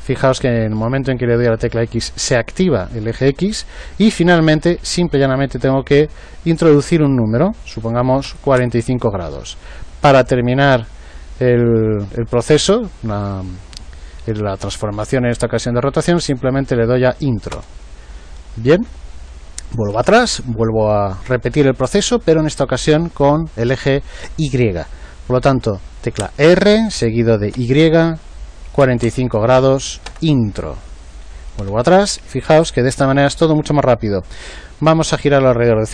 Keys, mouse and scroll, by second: 20.0 ctrl+z, 26.1 r, 31.6 ctrl+z.